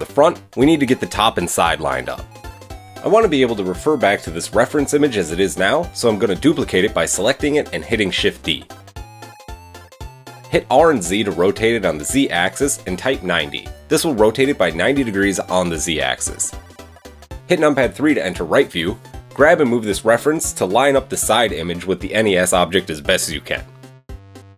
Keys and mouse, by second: 0.3-1.3 middle drag, 0.6 Tab, 1.3 click, 1.5 middle click, 1.9-3.1 drag, 3.1 shift+middle click, 3.4-8.8 shift+drag, 7.4 shift+d, 8.8-14.9 middle drag, 10.5 r, 13.4 r, 15.4-23.4 middle drag, 18.1 KP_3, 20.1 g, 24.0 g.